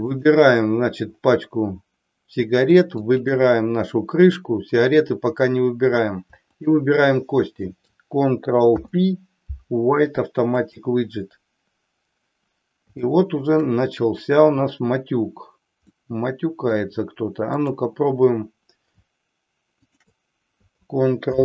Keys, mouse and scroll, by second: 0.1 click, 3.0 shift+click, 6.5 shift+click, 8.6 ctrl+p, 13.0-13.6 shift+middle drag, 16.0-16.9 middle drag, 17.5 click, 21.2 ctrl+p.